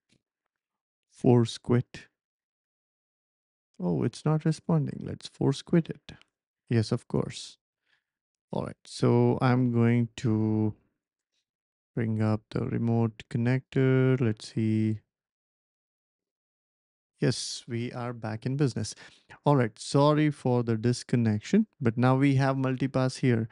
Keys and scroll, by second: 9.5 ctrl+space, 10.1-11.6 typing, 16.7 Return, 16.7 typing.